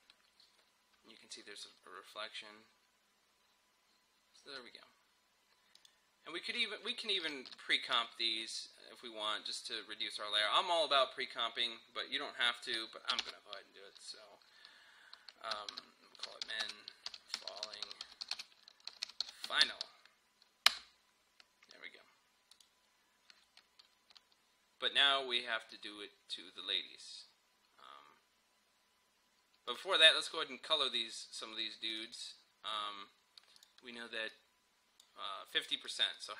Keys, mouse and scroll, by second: 4.5 space, 5.8 click, 13.2 shift+click, 13.2 ctrl+shift+c, 15.8-20.2 typing, 20.7 Return, 22.8 click, 29.7-36.3 drag.